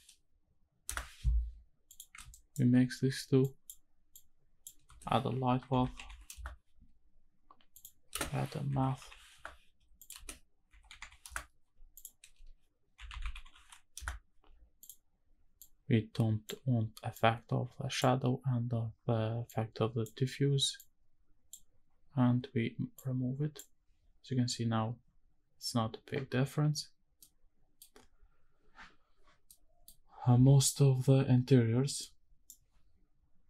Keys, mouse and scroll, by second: 2.3 ctrl+shift+right drag, 3.4 click, 4.1 click, 4.9 space, 8.1 space, 10.0 click, 10.1 space, 11.9 click, 12.3 space, 15.6-16.5 drag, 17.1-18.1 drag, 19.5 click, 20.8-21.6 drag, 22.9 click, 27.2 middle click, 29.5 middle click.